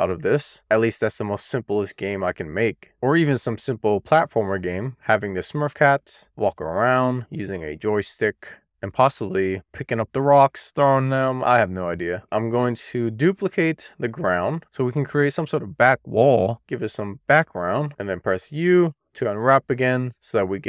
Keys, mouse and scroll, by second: 0.0 scroll down 1, 2.8 middle click, 3.3-4.1 middle drag, 4.3-4.7 scroll down 1, 4.7 shift+middle click, 4.9 shift+scroll down 1, 5.8-6.9 middle drag, 7.3-7.9 scroll up 1, 7.9 scroll down 1, 8.1 shift+middle click, 8.4 shift+scroll down 1, 8.9-9.7 scroll down 1, 9.7 click, 10.8 middle click, 12.2 click, 13.1 shift+d, 13.8 right click, 14.0 middle click, 14.9 e, 15.1 click, 15.3 0, 15.4-15.8 scroll down 1, 16.4 middle click, 16.5 click, 17.4 middle click, 17.7 middle click, 17.9-20.1 scroll down 1, 20.1 u.